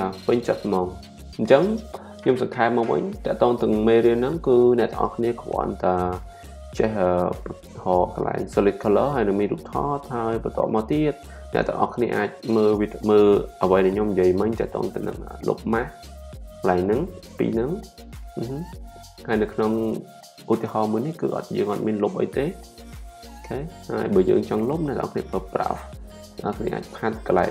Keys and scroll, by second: 25.0 b.